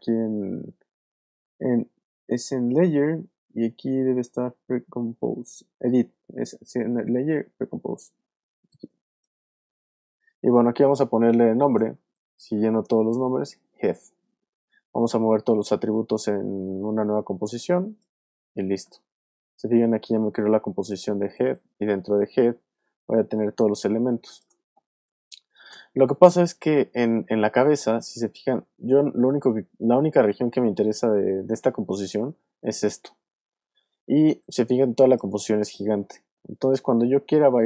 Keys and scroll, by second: 11.5-13.4 typing, 23.9 alt+space, 25.2 alt+space, 26.1 space, 31.6 space, 34.7 alt+space, 35.5 space.